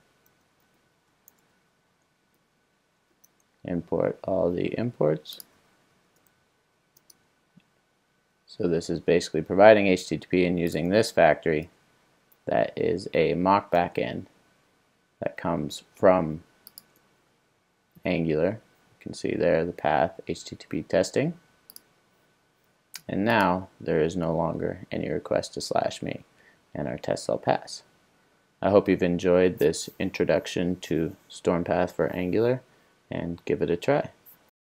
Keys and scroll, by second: 0.0 super+j, 1.0 Return, 1.7 super+s, 2.4 alt+Return, 11.6 alt+Return, 16.9 super+b.